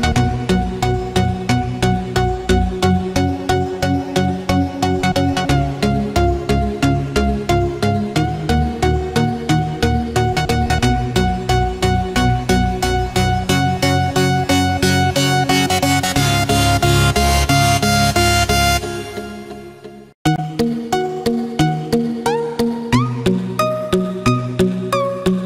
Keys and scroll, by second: 13.8 ctrl+z.